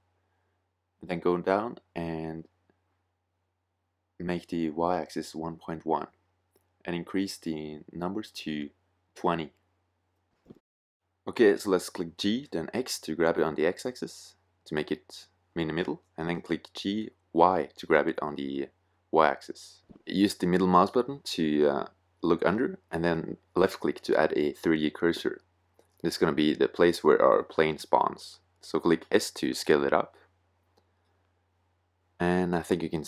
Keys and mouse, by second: 1.2-2.8 drag, 2.9-5.3 drag, 5.5-7.4 middle drag, 7.4-9.1 drag, 10.9 middle click, 11.4 g, 15.9 g, 28.1 s, 30.5 click.